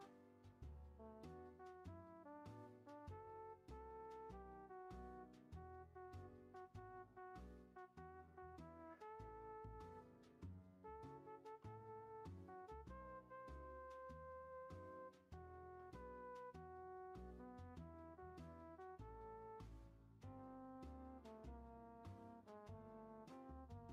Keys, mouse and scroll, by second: 0.2 ctrl+a, 5.2 click, 5.6-6.9 shift+middle drag, 6.9 click, 7.3 e, 10.9 click, 11.4 ctrl+a, 14.7 click, 15.5 ctrl+a, 17.3 click, 18.0 shift+middle click, 18.3 scroll up 2, 18.5 middle click, 19.2-20.9 shift+scroll up 2, 19.2-19.6 shift+middle drag, 20.9 g, 23.3 middle click, 23.7 scroll down 2.